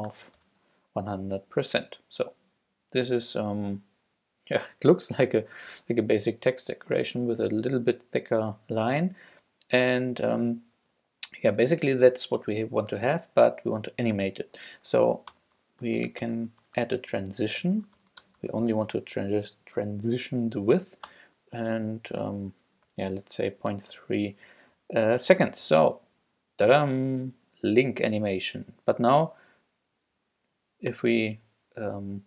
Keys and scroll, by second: 0.0-0.1 typing, 15.3 Return, 15.6-19.4 typing, 21.1-22.9 typing, 24.5 Up.